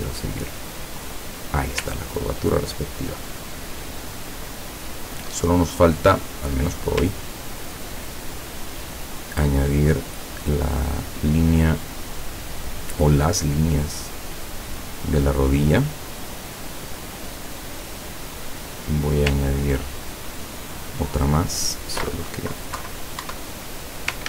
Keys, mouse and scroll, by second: 2.0-2.5 ctrl+scroll down 2, 6.0 click, 7.4-7.8 ctrl+scroll up 2, 10.5 click, 13.0 click, 14.6 click, 16.6 click, 18.3 click, 20.7 click, 22.9 Down, 23.4 Up.